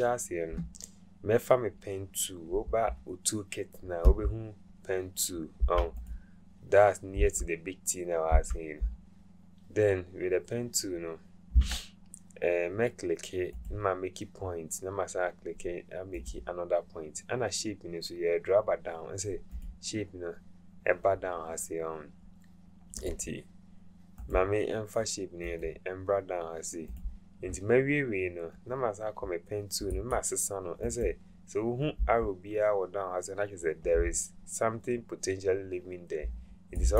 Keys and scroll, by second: 11.6 Caps_Lock.